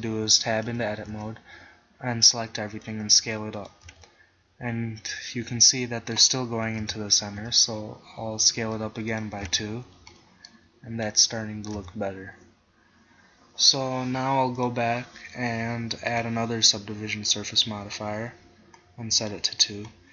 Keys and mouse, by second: 0.7 a, 1.2 a, 2.9 s, 4.0 Tab, 5.6 middle click, 6.8 KP_1, 7.6 Tab, 8.5 s, 9.5 Tab, 11.8 KP_1, 17.9 click, 19.2-20.1 drag.